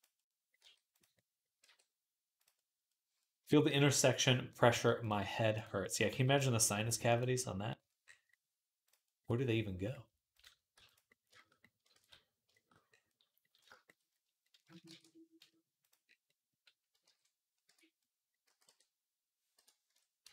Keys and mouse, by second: 0.4 g, 1.4 r, 4.5 r, 5.0 g, 5.9 g, 7.5-8.9 middle drag, 8.9 click, 9.7 middle click, 11.0 click, 11.1 shift+middle click, 11.6 ctrl+click, 11.9 ctrl+s, 12.3 shift+click, 12.5 click, 13.0-14.1 drag, 14.1-16.3 middle drag, 14.6 shift+a, 16.8 alt+g, 17.5 Tab, 18.2 s, 18.3-20.3 middle drag, 19.7 Tab, 20.0 x.